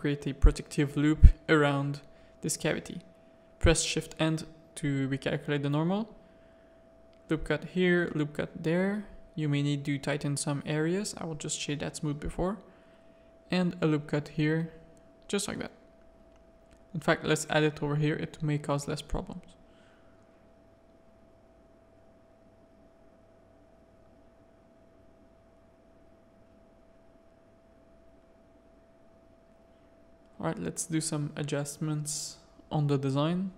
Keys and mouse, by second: 0.0 Tab, 0.2-1.4 middle drag, 1.6 z, 2.0 middle click, 2.4 Tab, 2.6 a, 3.3 shift+n, 4.2 Tab, 4.6 Tab, 5.1 ctrl+r, 7.2 ctrl+r, 9.6 a, 12.9 ctrl+r, 15.8 ctrl+z, 16.3 ctrl+r, 19.3 Tab, 19.5 middle click, 20.2 alt+a, 20.6 middle click, 21.0 z, 21.4 middle click, 22.4 middle click, 23.2-24.2 middle drag, 24.5 Tab, 24.9 click, 25.1 z, 25.2 a, 25.9 click, 26.4 z, 26.6 middle click, 27.0 g, 28.4 middle click, 29.7-33.0 drag, 33.2-33.5 drag.